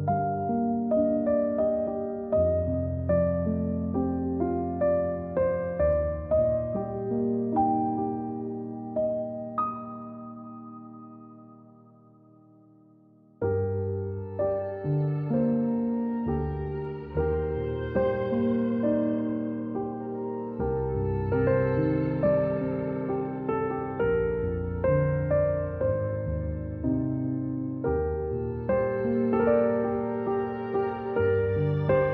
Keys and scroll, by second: 2.7-4.1 typing, 6.2 z, 8.7 space, 9.6 a, 30.3-32.1 typing.